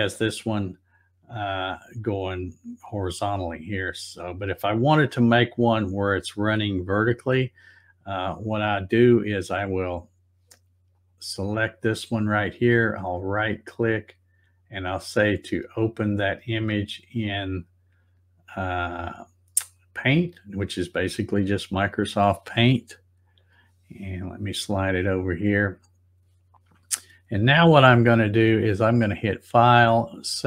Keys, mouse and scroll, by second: 9.1 click, 10.9 click, 12.3 right click, 21.4 click, 23.4-24.8 drag, 25.7 click, 28.7 click, 30.0 click.